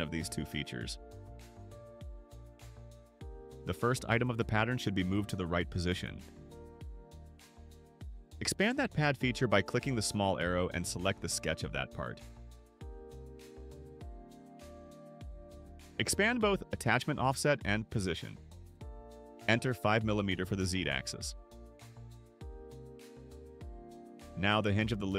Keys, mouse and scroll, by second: 0.9 click, 3.2 click, 4.2 click, 9.2 click, 12.2 click, 16.1 click, 18.0 click, 19.4 click, 20.7 5, 21.3 Return.